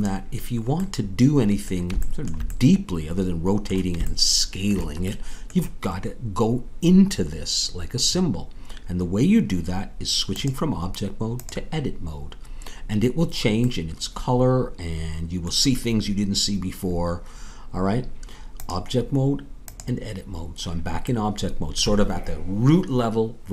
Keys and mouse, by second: 3.2-8.5 middle drag, 10.3-13.8 drag, 13.8 middle click, 18.6-20.5 drag, 21.6-23.5 middle drag.